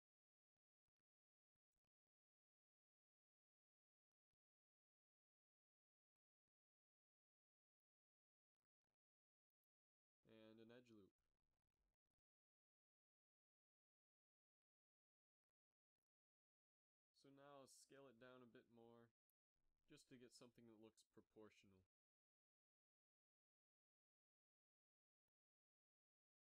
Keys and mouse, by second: 0.5 right click, 2.0 f, 4.2 f, 4.7-6.7 drag, 4.7 a, 6.5 shift+e, 8.6 shift+e, 9.7 z, 11.7 ctrl+r, 14.2 Tab, 14.5 a, 17.1 Tab, 17.8 a, 17.9 a, 18.3 s, 20.6 KP_7, 21.0 z, 21.7 g, 23.1 z, 23.8 a, 24.1 Tab, 24.4 a, 24.9 a, 25.6 ctrl+s.